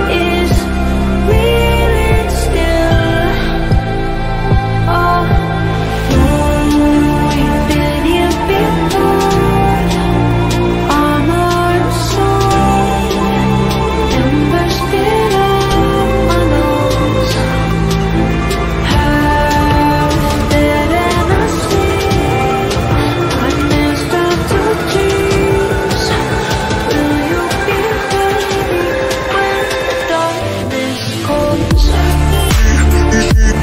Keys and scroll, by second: 2.5 Escape, 2.8 Delete, 5.8 F3, 6.1 Escape, 8.4 shift+F2, 13.8 F3, 14.6 shift+F2, 15.6 F3, 15.7 Escape, 18.4 F3, 19.2 F4, 21.0 shift+Page_Up, 24.7 Escape, 28.8 Escape, 30.8 Escape.